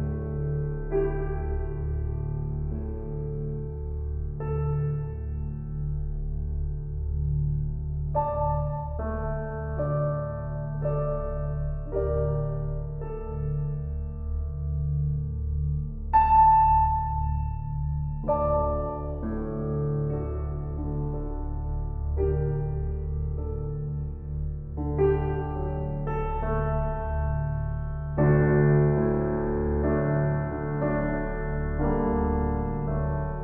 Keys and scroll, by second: 0.4 ctrl+-, 22.1 [.